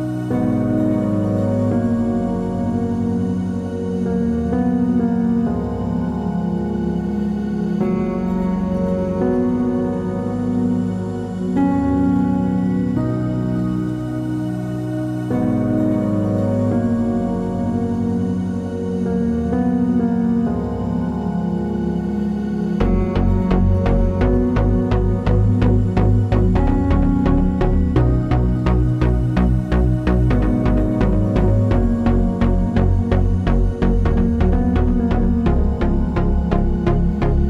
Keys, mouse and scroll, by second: 0.9 click, 1.4 h, 1.6 middle click, 2.1 drag, 2.4-3.4 middle drag, 3.4 click, 3.9 drag, 4.1-4.5 middle drag, 7.5-8.5 middle drag, 8.5 click, 8.8-9.9 middle drag, 9.9 click, 10.3 g, 12.5 click, 18.6-20.6 scroll down 1, 20.6 alt+h, 21.1 click, 21.5 h, 22.2 click, 22.4 middle click, 22.9 shift+click, 23.5 ctrl+j, 26.9-27.5 middle drag, 27.5 click, 29.0 middle click, 29.4 click, 29.6-30.2 middle drag, 29.8 scroll up 1, 30.2 click, 30.9 x, 31.1-31.6 middle drag, 31.6 click, 32.2 x, 32.3-33.3 middle drag, 32.8 scroll down 1, 33.3 click, 34.9-35.7 drag, 35.8 click, 36.1-36.6 middle drag, 36.6 click, 36.7-37.4 middle drag.